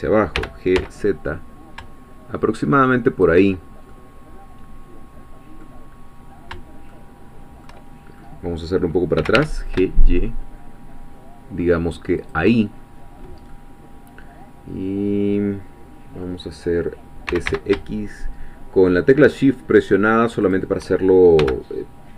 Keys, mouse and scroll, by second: 0.3 g, 0.8 z, 3.1 shift+click, 3.9-5.9 middle drag, 5.9-6.5 scroll up 1, 6.9-8.4 shift+middle drag, 9.2 g, 9.3 y, 12.2 shift+click, 12.8 shift+scroll down 1, 13.5-16.4 middle drag, 17.3 s, 17.5 x, 20.4 shift+click, 21.4 g.